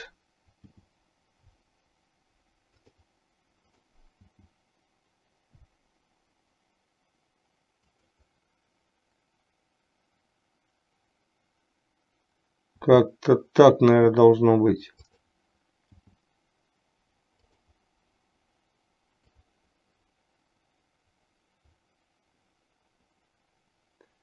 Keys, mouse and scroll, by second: 0.8 g, 4.4 g, 12.9 s, 16.1 g, 19.6-24.2 drag.